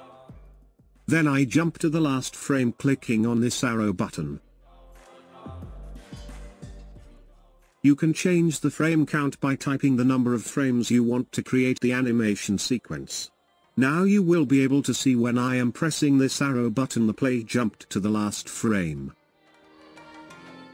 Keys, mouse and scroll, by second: 0.0-1.1 drag, 3.7-9.4 drag, 9.4 KP_0, 12.2-15.3 drag, 17.1-20.7 drag.